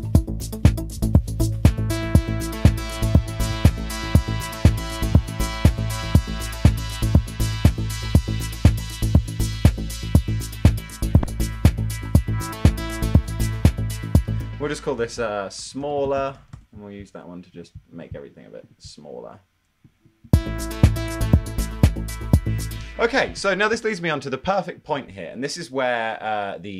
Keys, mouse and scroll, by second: 11.7 ⟲, 14.7-17.0 typing, 23.6 space.